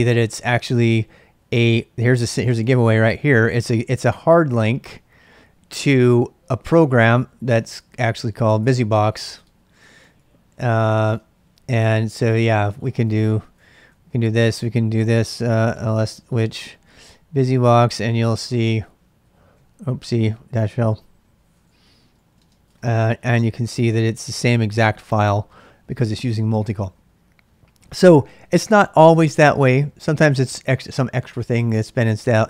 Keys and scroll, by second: 7.6 ctrl+[, 7.7-16.1 typing, 16.8 Tab, 17.5-18.0 Right, 18.4 `, 18.6 Return, 19.2 Up, 19.5-20.8 Left, 19.9-22.4 typing, 21.0 Right, 22.7 Return.